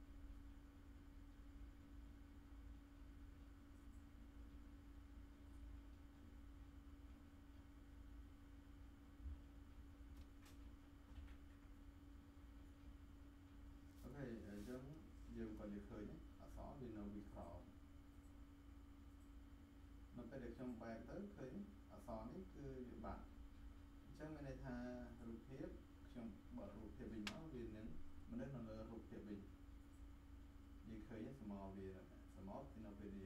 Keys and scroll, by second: 11.1 v.